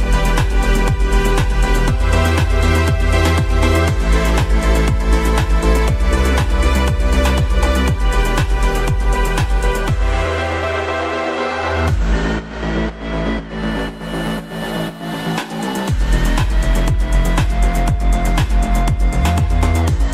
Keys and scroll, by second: 4.0 shift+Page_Up, 16.5 shift+F2, 17.2 Escape.